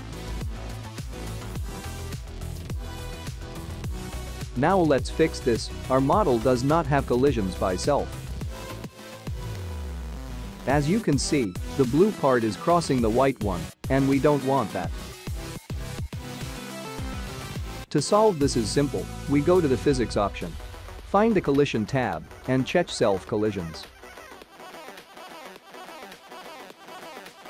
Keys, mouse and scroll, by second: 8.3 space, 9.9 click, 10.2 `, 11.5 `, 12.3 middle click, 12.9 click, 13.4 click, 14.0 middle click, 17.2 click, 17.2 middle click, 17.2 `, 17.6 shift+middle click, 18.0 scroll up 3, 18.4 click, 19.8-21.5 scroll down 22, 23.1 click, 23.5-26.2 scroll down 11, 26.8 click.